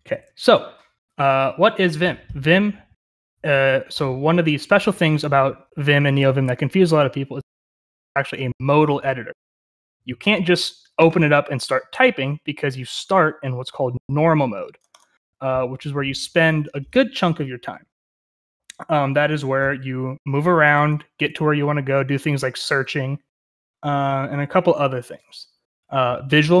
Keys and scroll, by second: 0.0-0.1 typing, 19.6-22.0 typing.